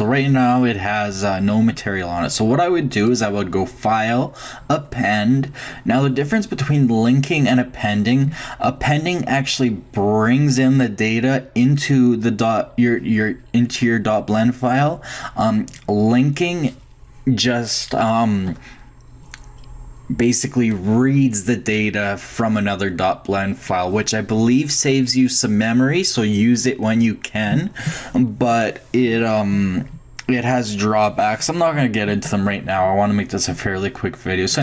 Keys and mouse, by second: 0.8-2.6 drag, 3.1-4.9 drag.